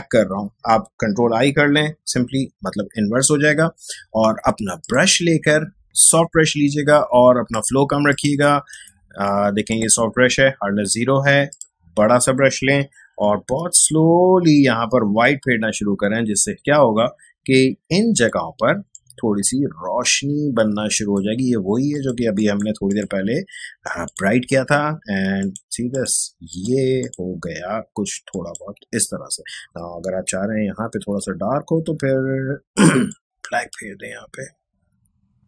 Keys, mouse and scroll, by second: 0.2 click, 1.4 ctrl+i, 4.8-8.7 drag, 8.7 right click, 9.7 click, 13.0-13.6 typing, 13.8-23.2 drag, 29.0 x, 30.3-32.0 typing, 33.1-35.4 drag.